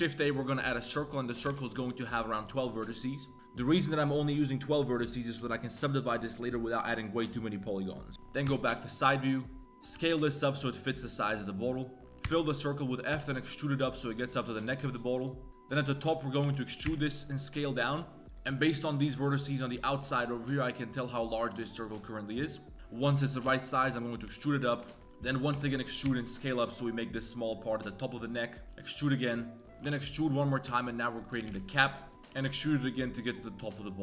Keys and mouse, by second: 1.2 click, 8.1 Tab, 8.1 KP_3, 8.1 KP_2, 8.4 KP_3, 8.7 1, 9.9 s, 12.0 ctrl+z, 12.0 f, 12.0 KP_3, 12.2 f, 13.1 e, 14.6 z, 14.9 shift+click, 15.5 ctrl+z, 16.4 e, 16.8 s, 18.2 ctrl+z, 18.2 s, 18.4 s, 23.4 e, 24.8 shift+middle click, 25.0 shift+KP_3, 25.0 shift+middle click, 25.5 e, 26.0 s, 28.0-32.2 typing.